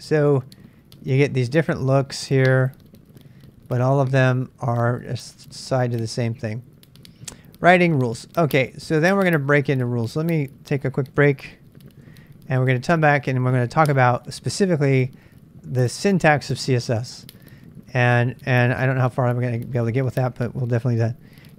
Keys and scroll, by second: 11.1 super+Tab, 12.0 super+Tab.